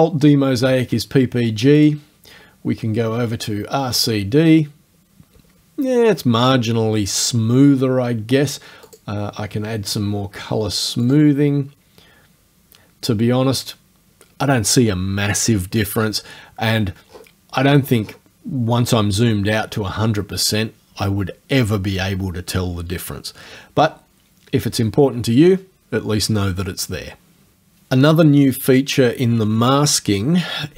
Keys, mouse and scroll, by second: 1.8 click, 4.0 click, 8.9 click, 11.1 click, 16.8-18.3 scroll down 4, 18.7-19.0 scroll down 1.